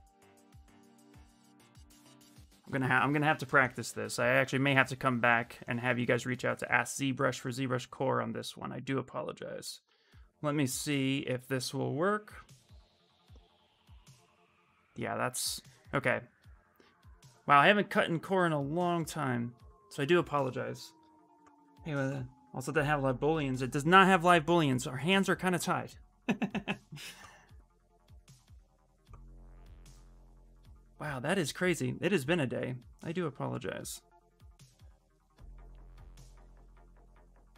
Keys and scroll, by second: 3.5 shift+f.